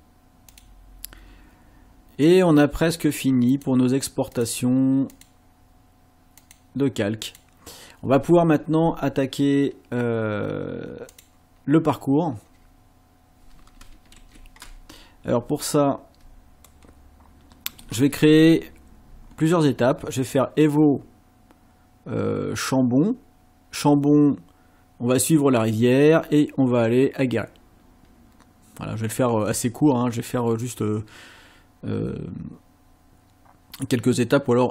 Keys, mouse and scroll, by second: 0.5 click, 3.5 click, 4.3 click, 5.1 click, 6.4 click, 7.3 click, 11.1 click, 14.2 ctrl+shift+a, 15.6-16.2 ctrl+scroll down 2, 16.7-18.0 ctrl+middle drag, 19.3 ctrl+scroll up 2.